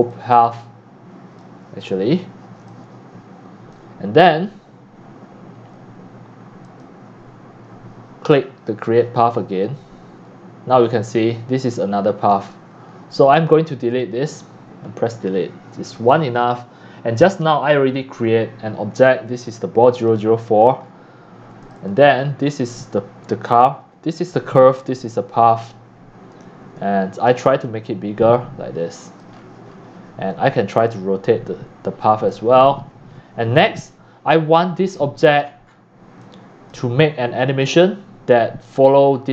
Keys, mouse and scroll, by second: 0.1-1.8 drag, 1.8-2.6 scroll up 3, 2.7-3.7 c, 5.4 click, 6.6 click, 7.7 click, 8.9 click, 9.6 click, 10.8 click, 11.6 click, 12.7 Escape, 13.9 click, 14.9 Delete, 15.8-16.2 drag, 16.4 drag, 19.1 click, 20.1 click, 20.8 scroll down 5, 21.7 click, 22.1-22.5 scroll down 11, 26.2-27.3 typing, 27.6-28.7 drag, 29.3-29.8 scroll down 7, 30.2 typing, 30.9-32.3 drag, 32.7 scroll down 1, 32.7 middle click, 32.7-33.3 scroll, 33.1 middle click, 33.7 click, 34.6-35.0 scroll up 13, 35.0 middle click, 35.0 scroll down 10, 35.1 scroll up 7, 35.2-35.8 scroll down 25, 35.4 middle click, 35.9-36.8 typing, 36.7 click.